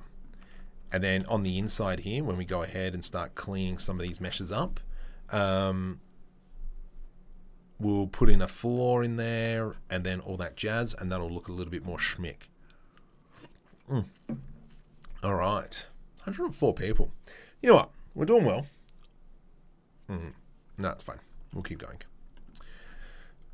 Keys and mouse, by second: 0.4 Tab, 0.8 Tab, 1.7 Tab, 22.8-23.4 drag.